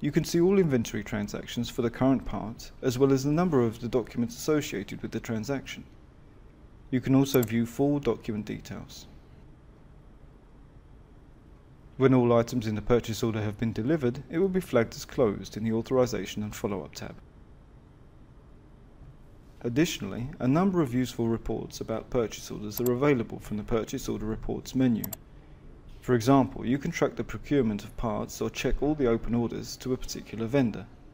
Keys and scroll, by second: 7.6 F6, 10.6 Escape, 12.1 Escape, 13.1 Escape.